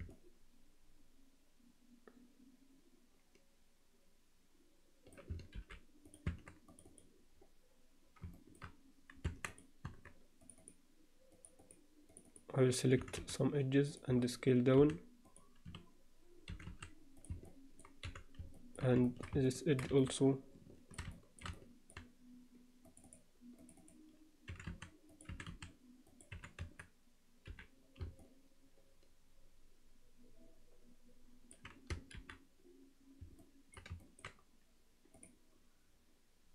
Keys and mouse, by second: 0.1-5.1 alt+middle drag, 5.6 alt+h, 6.0 click, 6.3 Tab, 6.6 click, 8.4 alt+shift+middle click, 9.2 Tab, 9.8 Tab, 10.4 click, 11.3 click, 11.6 click, 12.1 click, 13.0 e, 14.8 s, 16.5 e, 17.4 alt+middle click, 18.0 f, 18.5 middle click, 19.0 alt+shift+middle click, 19.4 ctrl+alt+middle click, 20.0-21.0 alt+shift+middle drag, 21.1 shift+middle click, 21.5 alt+middle click, 22.8 click, 23.6 click, 24.5 e, 25.3 e, 26.3 f, 26.6 Tab, 27.5 h, 28.2-31.5 alt+middle drag, 32.2 alt+h, 33.4 alt+middle click, 34.0 ctrl+middle click, 35.2-36.5 drag.